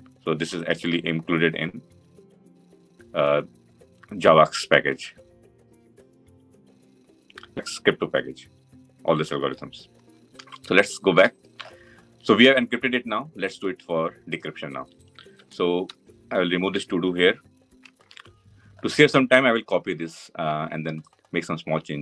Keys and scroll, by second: 1.5 ctrl+b, 9.1 ctrl+alt+Left.